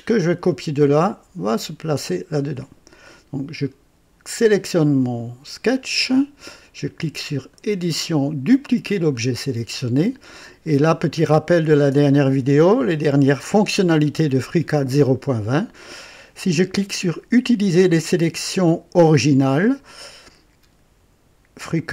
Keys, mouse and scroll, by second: 4.2 click, 7.5 click, 9.1 click.